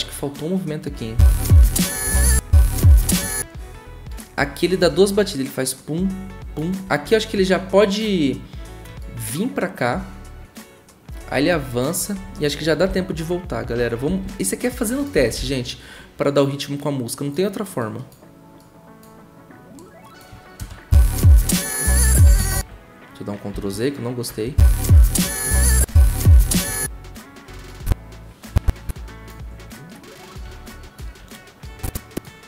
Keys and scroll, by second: 1.1 0, 2.2 typing, 12.9 =, 14.1 -, 15.1 =, 20.6 0, 22.5 ctrl+z, 23.5 ctrl+z, 24.4 0, 25.7 0.